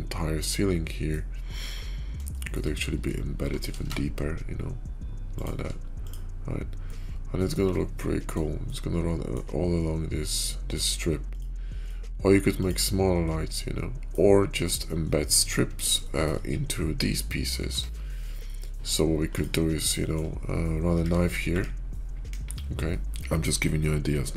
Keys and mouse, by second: 2.2 shift+middle drag, 3.2 g, 5.9 click, 6.7-8.2 middle drag, 8.6-9.2 middle drag, 12.3 x, 13.2 click, 15.3 click, 15.9 shift+middle click, 16.5 /, 17.0-17.4 middle drag, 17.6 Tab, 18.2 shift+middle click, 18.6 middle click, 19.7 shift+click, 21.4 `, 22.2 KP_5, 22.8 shift+click, 22.9 k.